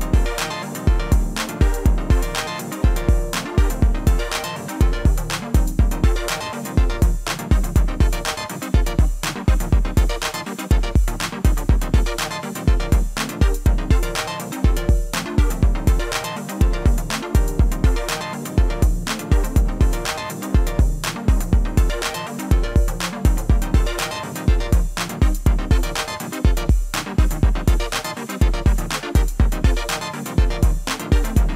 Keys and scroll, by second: 11.9-12.7 typing, 13.0 Return, 15.2 ctrl+a, 16.2 ctrl+a, 27.4 ctrl+a.